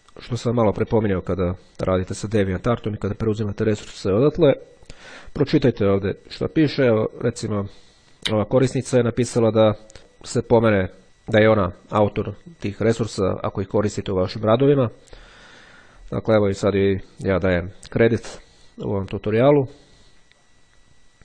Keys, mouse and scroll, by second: 10.5 click, 20.6-21.1 scroll down 1.